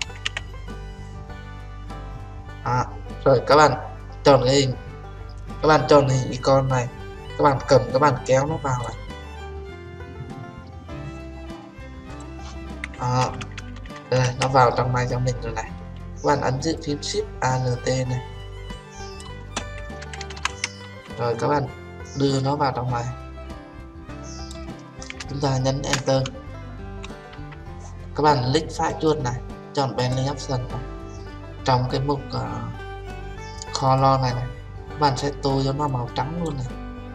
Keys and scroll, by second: 26.0 Return.